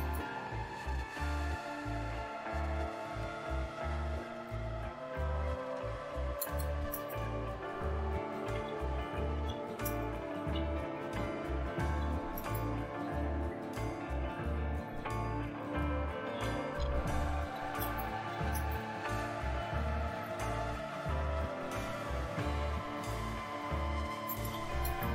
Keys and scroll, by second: 4.7 Return, 6.1-19.9 typing, 20.2 Return, 23.8-25.1 typing.